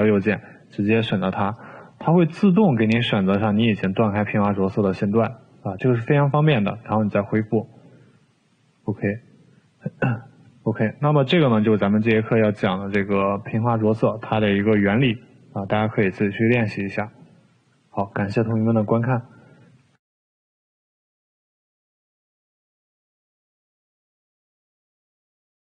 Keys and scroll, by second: 20.1 Delete.